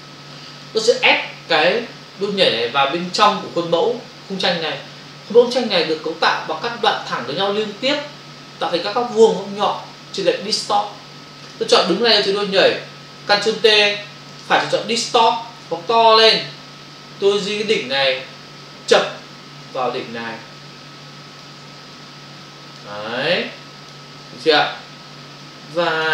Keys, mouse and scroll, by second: 12.5 click, 14.2 right click, 15.2 click, 16.0 ctrl+click, 18.5 click, 21.6 space, 24.6 space.